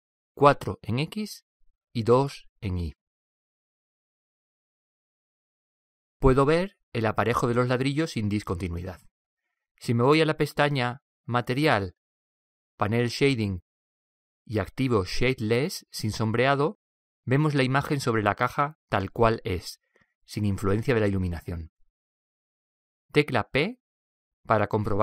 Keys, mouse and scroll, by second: 1.3 click, 3.6 click, 7.2-8.9 middle drag, 12.0-14.9 drag, 16.2-18.0 drag, 18.4-20.3 middle drag, 24.8 p.